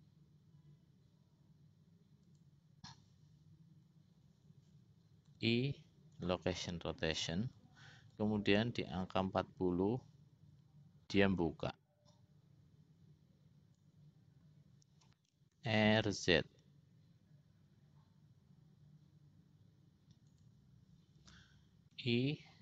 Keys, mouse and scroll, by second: 5.4 i, 8.6-14.4 drag, 16.1 r, 22.2 i.